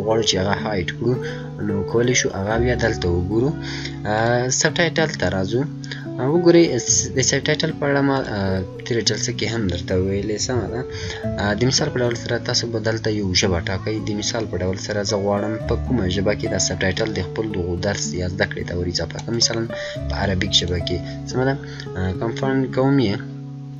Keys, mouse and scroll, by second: 4.0 click, 8.1 click, 12.8 click, 12.8-13.3 scroll up 1, 13.3-14.1 scroll down 1, 15.7 scroll down 1, 15.9-16.6 scroll up 1, 18.1 scroll down 1, 19.2 click.